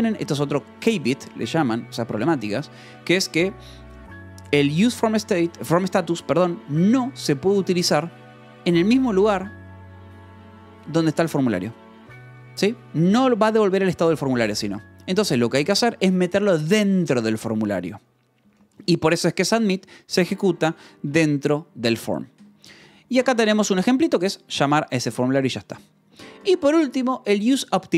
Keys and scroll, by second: 3.3 Escape, 16.9 shift+k, 17.7 Escape, 18.3-24.5 typing, 19.6 Escape, 22.3 Escape, 25.0 Escape, 25.6 shift+;, 26.3 j, 26.6 Return.